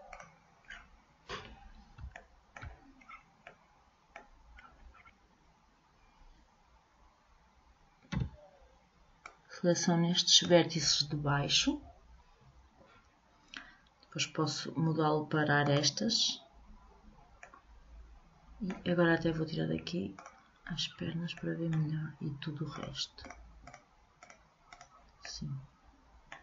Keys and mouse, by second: 0.9-5.0 middle drag, 5.0 click, 8.3 b, 15.8-17.6 drag, 18.0-20.3 middle drag, 20.3-22.0 drag, 21.6-23.4 middle drag, 22.9-25.4 drag, 25.4-26.4 middle drag.